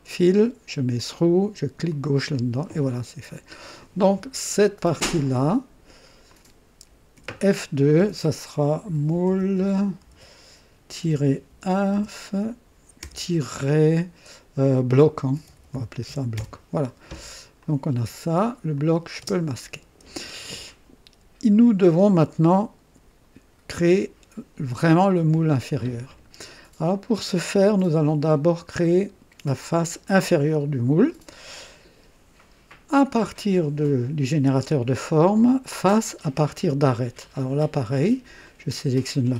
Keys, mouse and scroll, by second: 1.0 click, 1.9 click, 2.9-4.2 drag, 5.2 click, 6.3 click, 7.1 F2, 8.6-13.0 typing, 15.1-16.5 typing, 17.6 click, 18.7 click, 19.2 typing, 21.8-24.3 drag, 26.9-28.2 drag, 28.3 scroll up 1, 28.8 right click, 29.6 typing, 33.2 click, 36.0 click, 38.4 click.